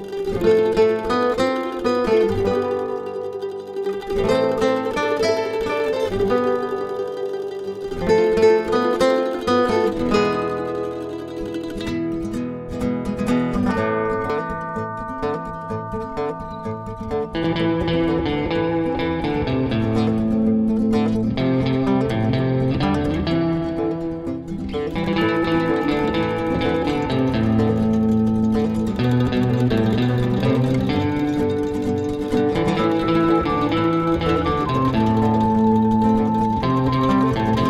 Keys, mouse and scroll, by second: 1.4 click, 3.5 click, 6.8 click, 8.4 click, 12.9 click, 15.3 click, 17.5 click, 21.1 click, 21.5 double click, 22.0-22.3 scroll down 1, 22.3-23.2 scroll up 1, 23.5 click, 26.3 click, 27.3 click, 29.9 click, 33.1 click, 36.8 F4.